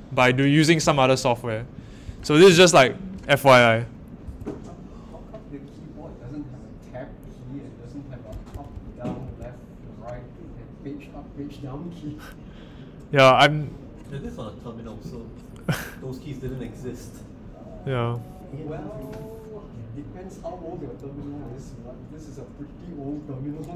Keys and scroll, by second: 8.5 Up, 8.7 Up, 9.2 typing.